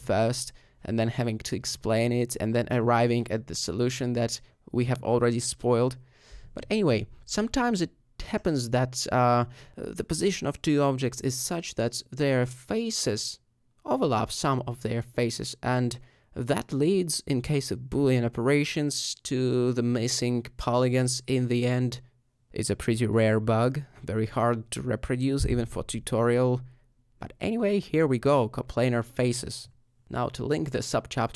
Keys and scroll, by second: 0.1 g, 1.2 x, 3.6 alt+g, 3.8 shift+z, 7.2 alt+a, 8.6 s, 8.6 w, 8.7 d, 9.3 d, 10.8-13.9 typing, 15.9 typing, 17.1 g.